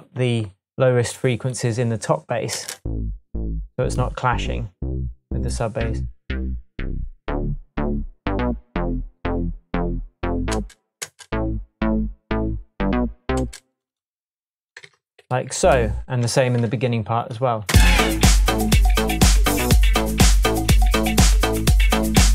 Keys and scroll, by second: 2.5 space, 10.5 space, 13.4 space, 14.8 super+a, 15.5 shift+super+a, 15.6 shift+super+Down, 16.2 shift+Tab, 17.7 space.